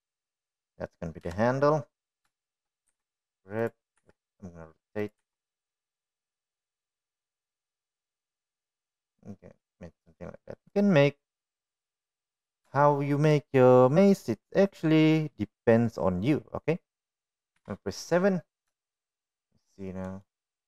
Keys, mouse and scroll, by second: 2.0 middle click, 2.8 KP_1, 3.8 shift+middle click, 4.4 g, 5.5 r, 6.7 g, 12.7-13.7 middle drag, 14.4 shift+middle click, 15.9 middle click, 19.2 KP_7, 20.3 shift+middle drag.